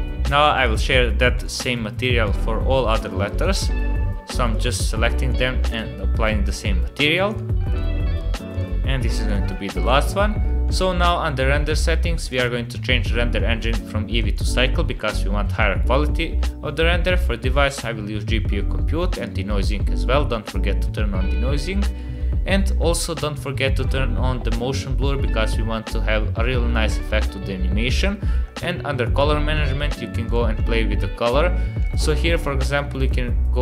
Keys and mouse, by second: 0.6 click, 2.2 click, 3.0 click, 4.5 click, 5.3 click, 7.5 click, 8.5 click, 9.3 click, 10.7 click, 12.3-14.5 drag, 17.0 click, 19.3 click, 23.7 click, 28.5 click, 30.2 click, 31.8 click, 33.0-33.6 drag.